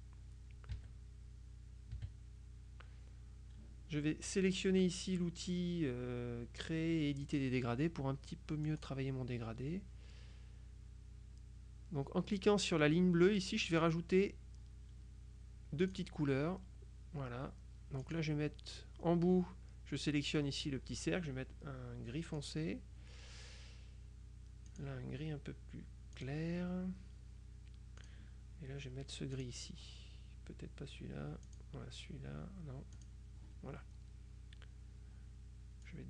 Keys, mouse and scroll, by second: 0.8 KP_Subtract, 2.0 KP_Subtract, 7.3 click, 8.8 click, 13.7 click, 15.9 click, 18.1 click, 22.5 click, 24.8 click, 26.2 click, 28.1 click, 29.4 click, 31.5 click, 33.0 click, 35.9 click.